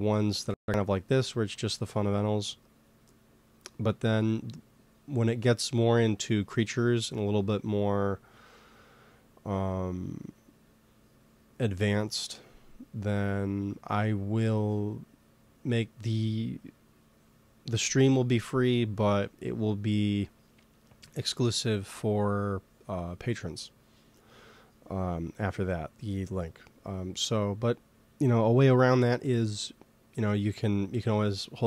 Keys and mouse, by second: 7.3-9.6 middle drag.